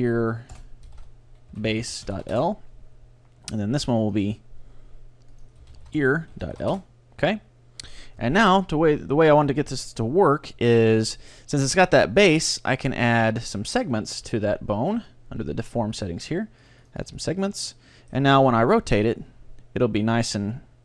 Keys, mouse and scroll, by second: 3.5-5.5 right drag, 4.1-7.2 drag, 8.3 Tab, 8.5-10.7 middle drag, 10.8-12.7 middle drag, 13.4-20.5 drag, 14.1-17.8 middle drag, 17.8 right click, 18.1-19.5 middle drag.